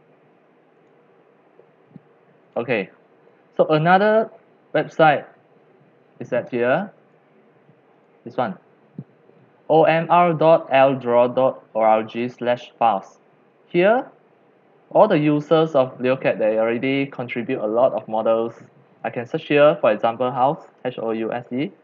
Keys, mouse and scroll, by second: 0.9-2.1 drag, 2.4 click, 2.8 click, 3.6 click, 4.9-7.0 drag, 8.1 click, 18.0-18.4 scroll down 6, 18.4-19.7 scroll up 20, 19.7 click, 20.5-21.8 typing.